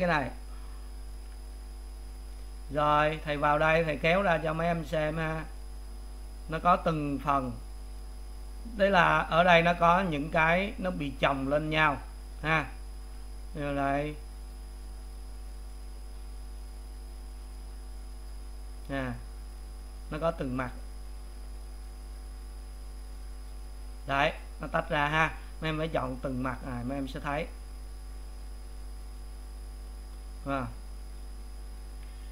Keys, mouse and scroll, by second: 1.3 a, 2.1 click, 3.1 click, 3.8 click, 4.3 click, 4.9 click, 5.6 click, 6.6-8.0 middle drag, 8.0 click, 8.6 click, 10.0 click, 10.5 click, 11.1 click, 12.4 click, 13.4-14.5 middle drag, 14.5 click, 15.3-16.7 middle drag, 16.7 click, 17.3 click, 19.0 click, 19.3-21.0 middle drag, 21.0 click, 21.7 click, 22.5-23.5 middle drag, 23.5-25.2 drag, 25.2 middle click, 26.1 click, 27.7 click, 28.4 click, 30.0 click, 30.8-32.1 middle drag, 32.1 a.